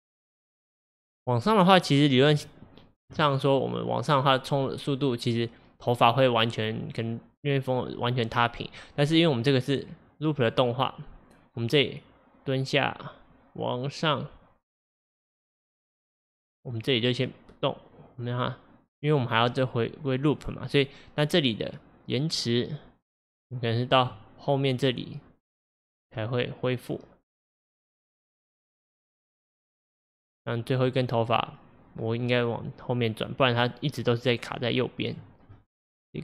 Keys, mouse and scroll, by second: 9.6-17.5 drag, 33.7-35.6 drag, 35.6-36.2 middle drag.